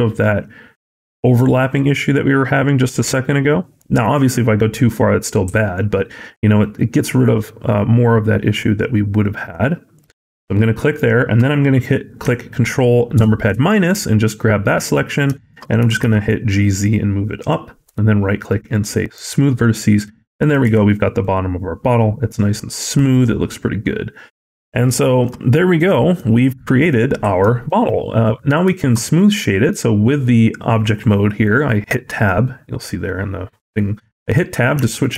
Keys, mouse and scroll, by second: 10.4 middle click, 13.0 ctrl+KP_Subtract, 13.7-14.6 scroll down 2, 14.6 middle click, 14.6-14.9 scroll down 1, 14.9 scroll up 2, 15.2 shift+middle click, 15.7 g, 17.7 right click, 19.9 middle click, 20.5 Tab, 20.7 scroll down 4, 21.0 middle click, 24.9 shift+middle click, 25.3 scroll up 3, 25.7 middle click, 26.2-26.7 scroll down 2, 26.7 middle click, 27.3 scroll down 1, 27.5 middle click, 27.8-28.4 scroll up 2, 28.6 shift+middle click, 28.9 scroll up 2, 29.3 middle click, 34.6 Tab, 35.0 Tab.